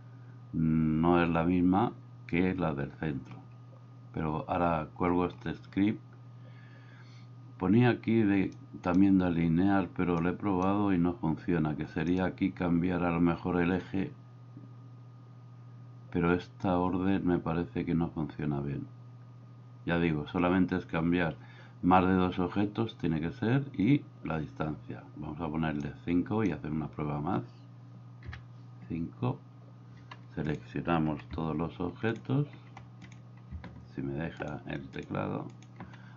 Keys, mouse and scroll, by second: 8.7 click, 10.2 click, 25.9 click, 28.2 KP_5.